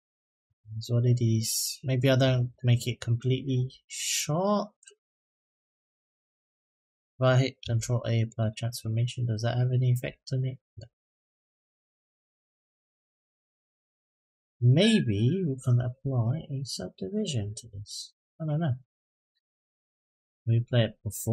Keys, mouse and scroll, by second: 4.5 Tab, 4.9 click, 5.2-5.8 middle drag, 6.5 click, 7.4 ctrl+a, 8.8-9.4 middle drag, 9.8 click, 10.2 middle drag, 11.5-13.6 drag, 15.7-17.4 drag, 19.3 click, 20.5-21.3 drag.